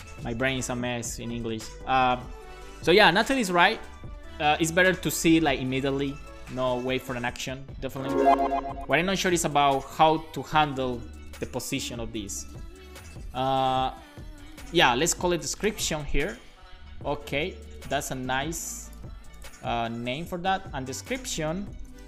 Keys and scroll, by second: 14.8-16.4 typing, 16.5 super+s, 21.8 Return, 21.9-22.0 typing.